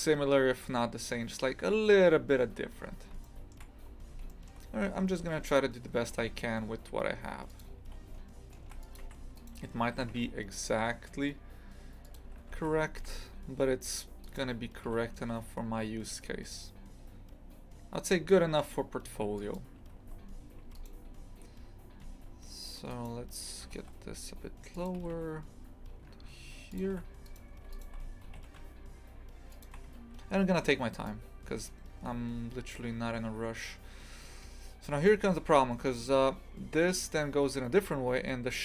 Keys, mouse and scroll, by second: 3.2 shift+middle click, 3.7-4.3 scroll up 3, 4.3 shift+middle click, 5.2 1, 5.5 right click, 6.0 g, 8.6 ctrl+r, 9.4 right click, 10.0 g, 12.5 ctrl+r, 14.2 right click, 14.9 g, 20.0 KP_2, 20.6 KP_2, 20.7 right click, 22.0 a, 22.9 right click, 23.6 g, 25.0 g, 27.2 right click, 27.5 1, 27.7 right click, 28.3 g, 30.6 2, 30.9 right click, 32.1 a, 34.7 scroll down 2, 35.1 shift+middle click, 35.5 scroll up 1.